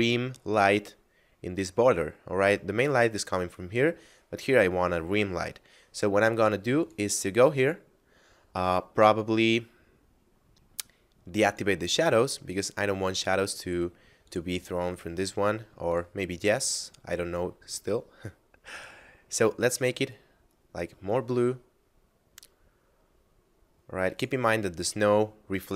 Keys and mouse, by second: 6.8 click, 11.3 click, 14.1 click, 18.5 click.